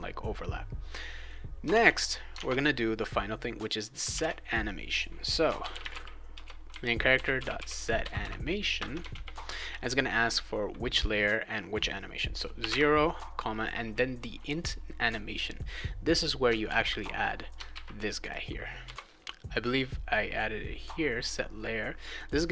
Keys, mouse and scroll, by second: 1.7 alt+Tab, 2.3 alt+Tab, 4.1 alt+Tab, 5.2-9.1 typing, 8.7 Return, 12.3-13.1 typing, 16.0 click, 16.2 click, 16.6 ctrl+c, 17.5 ctrl+click, 17.7 ctrl+v, 18.2 click, 18.8 ;, 22.0 click, 22.1 click.